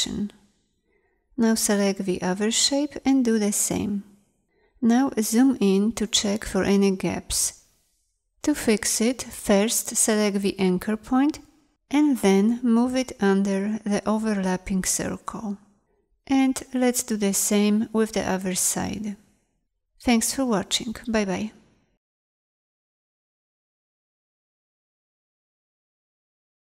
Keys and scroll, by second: 1.9 a, 3.0 g, 6.2 z, 9.0 a, 16.9 ctrl+0, 17.7 z, 18.4 a, 19.4 ctrl+0.